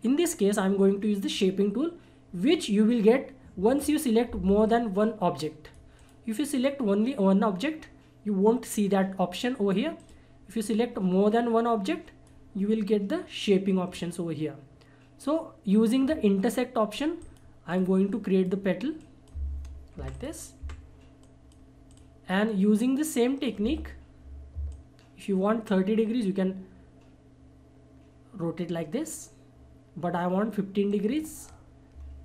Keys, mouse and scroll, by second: 2.4-5.9 drag, 10.0-14.9 drag, 17.2-20.0 drag, 20.0 Delete, 20.1 click, 20.6 Delete, 21.2-24.7 drag, 24.7-30.9 ctrl+drag, 30.9 ctrl+right click.